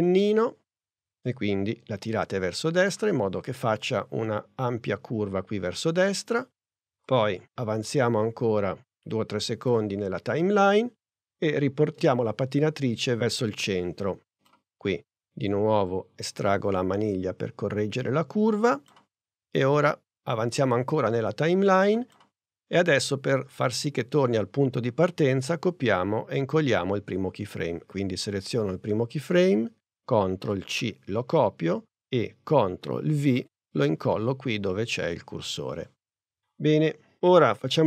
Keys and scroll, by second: 30.6 super+c, 33.2 super+v.